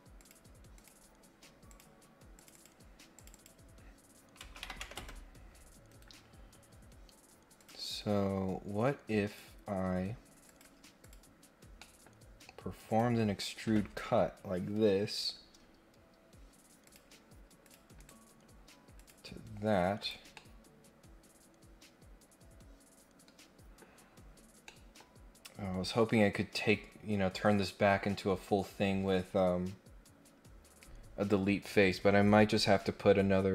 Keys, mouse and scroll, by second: 0.2 click, 0.7 click, 1.7 click, 2.3 click, 3.1 click, 5.8 Escape, 7.5 click, 9.2 click, 10.4 click, 11.0 click, 11.7 middle click, 12.9 click, 16.8 click, 17.6 click, 17.9 right click, 18.9 click, 20.0 click, 20.3-23.7 middle drag, 24.0 scroll down 2, 24.2-24.6 scroll up 3, 24.6 middle click, 25.0 scroll down 1.